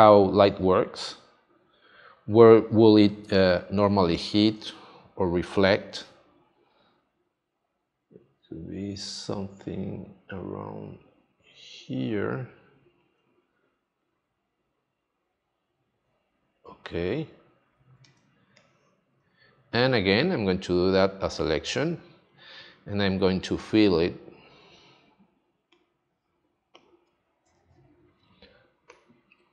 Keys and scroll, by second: 3.8 space, 18.1 space.